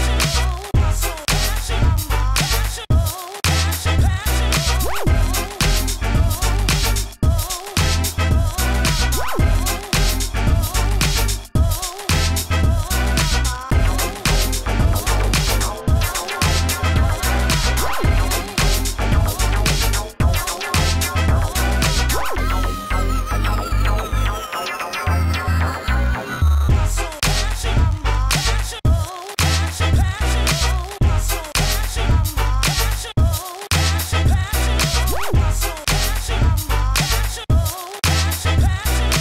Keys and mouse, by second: 0.9 s, 1.2 s, 2.7 alt+s, 3.9-5.3 typing, 4.2-5.5 drag, 6.4 f, 6.6 s, 7.8 s, 8.9 ctrl+s, 9.0 drag, 11.6 s, 11.8 f, 12.2-12.6 drag, 12.6 ctrl+z, 12.7 ctrl+z, 13.6 Tab, 13.9 Tab, 14.1 f, 14.3-15.2 drag, 14.8 s, 15.2 f, 18.3 s, 21.9 s, 22.7 s, 23.7 s, 24.2 s, 25.7 s, 25.9 s, 26.9-29.1 typing, 31.1 s, 31.3 f, 32.1 s, 32.4 shift+f, 33.5 s, 36.4 s, 36.7 f, 37.3 Tab, 37.4 Tab, 38.3 s, 39.0 shift+f.